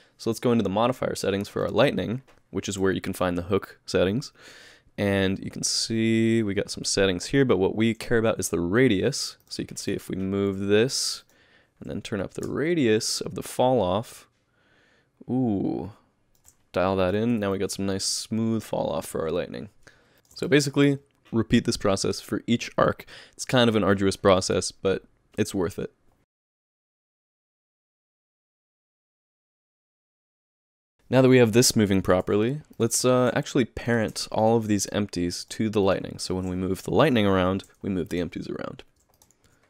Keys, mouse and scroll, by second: 1.6 click, 9.4 click, 9.7 g, 11.2 click, 12.4 click, 17.0 click, 17.2 g, 20.1 shift+middle click, 20.5 middle click, 26.2 shift+middle click, 26.2 middle click, 26.2 click, 26.2-30.8 typing, 26.3 Tab, 26.3 alt+a, 26.3 click, 26.4 shift+middle click, 26.4 shift+right click, 26.4-26.8 scroll down 4, 26.5 Tab, 26.6 shift+click, 26.7 Tab, 26.7 shift+middle click, 26.8 alt+a, 26.8 middle click, 26.8 click, 26.8 middle click, 26.9 shift+click, 26.9 middle click, 26.9 middle click, 26.9 click, 27.0 middle click, 27.1 Tab, 27.1 shift+right click, 27.1 middle click, 27.2 shift+click, 27.3 alt+a, 27.3 middle click, 27.4 middle click, 27.4 shift+click, 27.5 ctrl+h, 27.5 click, 27.5 Tab, 27.6 click, 27.6 middle click, 27.6 click, 27.7 click, 27.8 middle click, 27.9 shift+middle click, 27.9 shift+right click, 27.9 scroll down 2, 28.0 middle click, 28.1 middle click, 28.1 click, 28.1 shift+click, 28.2 ctrl+h, 28.3 Tab, 28.4 click, 28.4 click, 28.4 middle click, 28.6 click, 28.7 middle click, 28.7 click, 28.8 click, 28.8 middle click, 28.9 Tab, 28.9 shift+middle click, 29.0 alt+a, 29.0 middle click, 29.0 shift+right click, 29.1 middle click, 29.2 Tab, 29.2 click, 29.3 middle click, 29.3 click, 29.4 shift+click, 29.4 Tab, 29.4 shift+click, 29.5 Tab, 29.5 ctrl+h, 29.5 shift+click, 29.6 click, 29.6 middle click, 29.7 click, 29.8 alt+a, 29.8 middle click, 29.9 shift+middle click, 29.9 click, 30.0 shift+middle click, 30.0 shift+right click, 30.1 Tab, 30.1 middle click, 30.1 shift+click, 30.1 middle click, 30.2 click, 30.2 shift+click, 30.2 ctrl+h, 30.4 middle click, 30.5 middle click, 30.5 click, 30.5 click, 30.6 scroll down 5, 30.7 alt+a, 30.7 click, 30.8 shift+middle click, 32.2 g, 33.9 click, 34.4 shift+click, 34.8 click, 35.4 click, 35.9 shift+click, 36.2 shift+click, 37.5 ctrl+p, 39.2 click, 39.5 g.